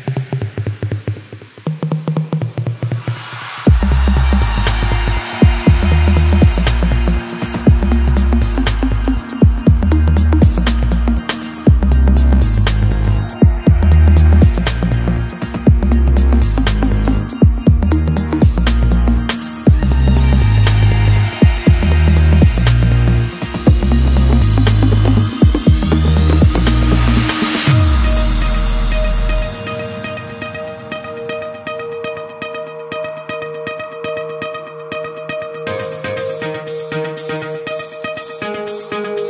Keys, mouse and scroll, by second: 0.0 shift+middle click, 0.3-2.9 typing, 1.5 alt+click, 2.0 middle click, 3.9-11.0 typing, 4.6 scroll down 1, 4.7 middle click, 5.0 scroll up 6, 5.0 shift+middle click, 5.2 alt+click, 5.7 click, 5.9 scroll down 2, 6.2 alt+click, 6.6 scroll up 1, 6.9 alt+click, 7.7 click, 8.4 click, 9.0 click, 9.8 click, 10.0 click, 10.3 click, 10.5 shift+click, 10.8 shift+middle click, 10.8 click, 11.2 click, 11.5 scroll down 2, 11.6 shift+middle click, 11.7-12.2 scroll up 2, 11.9 alt+click, 12.6 scroll down 1, 12.9 shift+middle drag, 13.0-19.1 typing, 13.1 shift+drag, 13.5 shift+click, 13.6 shift+middle click, 13.7 shift+click, 14.3 shift+middle click, 14.5 scroll up 2, 14.8 middle click, 15.0 click, 15.8 click, 16.8 click, 17.7 click, 18.4 click, 19.4 shift+middle click, 20.0 scroll down 2, 20.0 shift+middle click, 20.3 scroll up 2, 20.3 click, 20.6 shift+click, 20.7 middle click, 20.8 scroll down 1, 21.1 middle click, 21.2-26.6 typing, 21.4 middle click, 21.5 click, 21.8 middle click, 22.3 shift+click, 22.5 middle click, 22.9 shift+middle click, 23.6 shift+middle click, 23.8 scroll up 1, 23.9 drag, 23.9 shift+middle click, 24.2 middle click, 24.4 shift+click, 24.7 middle click, 25.2 shift+middle click, 25.5 click, 25.8 middle click, 26.2-26.6 middle drag, 26.8 shift+middle click, 27.5 click, 27.8 shift+middle click, 28.3 middle click, 28.5 shift+click, 28.6 middle click, 28.8 g, 29.2 shift+middle click, 29.6 middle drag, 29.6 scroll up 1, 29.6 click, 29.8-31.1 typing, 30.2 click, 30.6 middle click, 31.2 shift+middle click, 32.1 shift+click, 32.3-35.5 typing, 32.6 click, 33.0 click, 33.4 click, 33.9 click, 34.2 scroll down 1, 34.3 shift+middle click, 34.4-34.7 scroll up 2, 34.7 click, 35.1 shift+middle click, 35.2 click, 35.6 click, 35.7 click, 35.8 shift+click, 36.0 scroll down 3, 36.1 shift+middle click, 36.4 click, 36.5 g, 36.7 scroll down 1, 36.7 middle click, 36.8 Tab, 37.0 middle click, 37.1 scroll up 3, 37.2 shift+middle click, 37.5 click, 37.6 middle click, 37.9 scroll up 1, 38.1 2, 38.2 3, 38.3 shift+click, 38.4 middle click, 38.6 shift+click, 38.7 shift+click, 38.7 middle click.